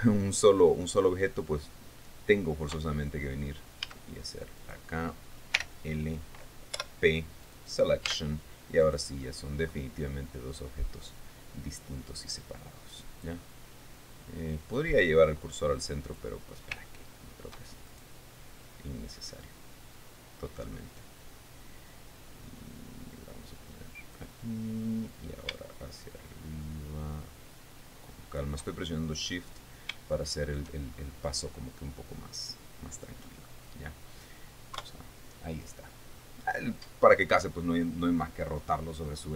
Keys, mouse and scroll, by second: 3.3 Tab, 4.4 a, 5.1 right click, 6.1 l, 7.3 p, 8.0 click, 8.7 Tab, 9.4 right click, 10.6-10.9 scroll up 1, 12.9 click, 15.3-16.9 drag, 17.4 shift+middle click, 18.5 shift+right click, 20.0-24.9 drag, 25.7-29.1 drag, 29.8-30.5 scroll down 4, 30.7 shift+middle click, 31.5-31.9 shift+scroll up 3, 33.0 scroll down 2, 33.8-34.2 scroll up 1, 34.4 scroll down 2, 35.3 KP_3.